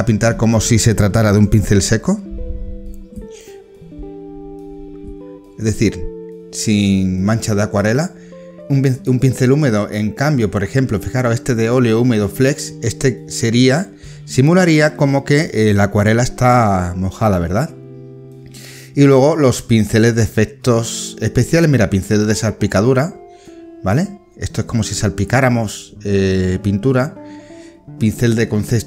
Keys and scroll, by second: 8.6 ctrl+z.